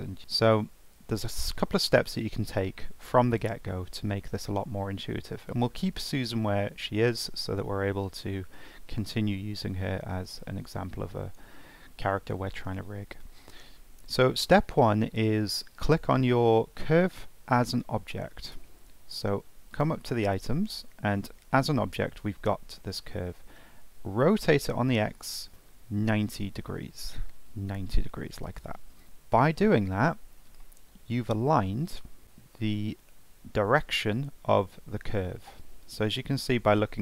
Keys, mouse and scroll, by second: 0.5 z, 0.8 z, 1.0 z, 1.2 z, 2.6 ctrl+z, 3.2 ctrl+z, 6.1-11.6 shift+middle drag, 11.7-13.0 middle drag, 13.0 scroll up 1, 13.2-14.1 middle drag, 14.1 click, 14.5-17.6 middle drag, 18.5 n, 19.7 click, 22.7-25.3 middle drag, 25.3-26.9 drag, 29.0-31.7 middle drag, 35.7-36.0 scroll down 2, 36.0 middle click.